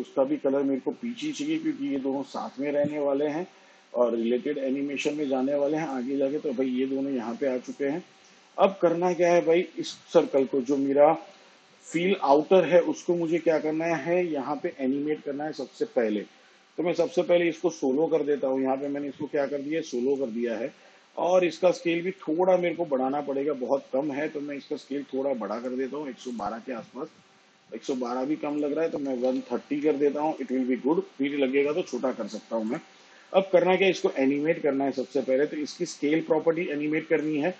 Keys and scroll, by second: 24.4 s, 30.4-32.0 typing.